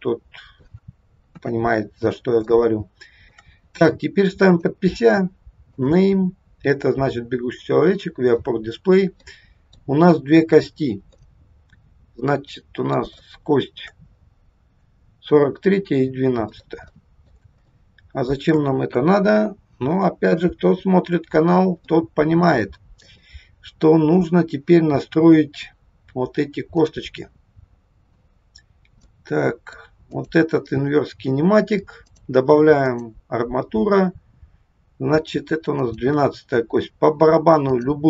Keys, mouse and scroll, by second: 1.4 KP_3, 2.0 scroll up 2, 2.5 shift+middle click, 4.4 click, 5.8 click, 9.3 middle click, 9.9-10.2 scroll up 4, 11.3 middle click, 13.2 shift+middle click, 14.0-14.3 scroll up 2, 15.6-16.3 scroll down 4, 16.5 middle click, 17.0 middle click, 17.6 shift+middle click, 18.0 shift+middle click, 18.9 KP_1, 20.4 KP_3, 21.1 scroll up 1, 21.9 middle click, 23.0 click, 26.8 click, 29.0 middle click, 30.0 click, 32.0 click, 35.8 click.